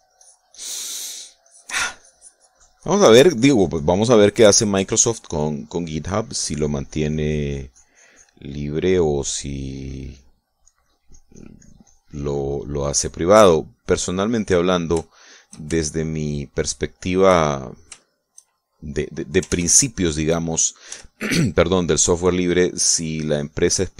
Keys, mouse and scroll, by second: 1.6-5.3 shift+drag, 5.4 shift+middle click, 6.4-9.4 shift+drag, 9.4 middle click, 10.5 click, 11.3 middle click, 11.8-13.4 drag, 13.9 click, 14.9 middle click, 16.0 shift+click, 16.8 shift+click, 17.4 shift+click, 17.9 shift+middle click, 19.0 shift+click, 19.5 shift+click, 20.4 ctrl+s, 20.6 ctrl+click, 21.9 f, 22.8 click, 23.4 click.